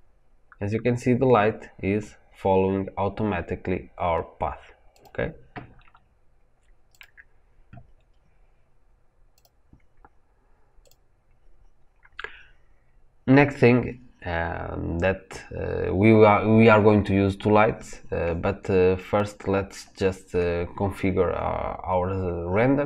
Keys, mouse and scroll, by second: 6.9 click, 10.7 drag.